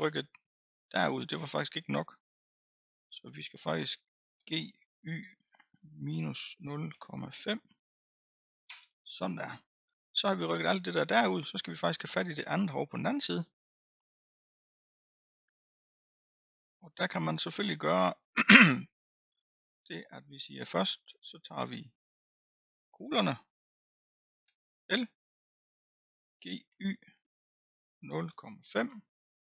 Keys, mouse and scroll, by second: 0.1-0.9 middle drag, 0.9-1.8 scroll down 1, 1.8-3.9 scroll down 1, 4.4 g, 11.6 middle click, 12.4 scroll down 1, 12.7-15.0 scroll up 3, 15.0 click, 15.7-16.7 scroll up 2, 16.7 middle click, 17.4-18.4 scroll down 4, 18.4-19.5 scroll up 3, 19.5-21.5 middle drag, 21.5-22.2 scroll up 2, 22.4-24.4 middle drag, 24.4 l, 25.2-26.3 scroll down 4, 26.3 g.